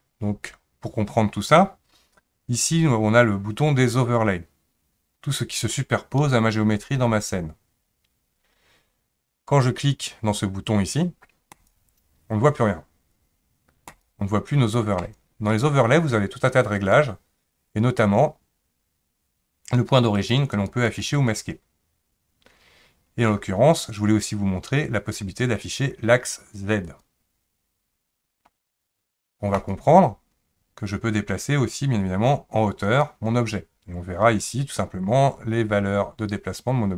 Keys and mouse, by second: 11.5 click, 13.9 click, 15.0 click, 15.5 click, 16.8-28.6 drag, 29.5 click, 31.7-33.0 drag.